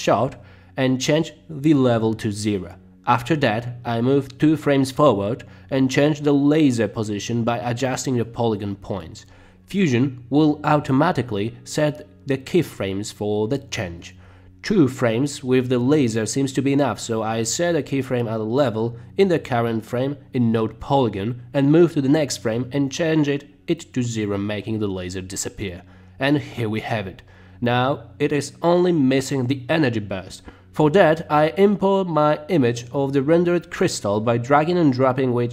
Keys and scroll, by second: 3.7 Right, 4.9 Right, 24.6 Right, 27.6 space, 31.9 space, 34.5 Return.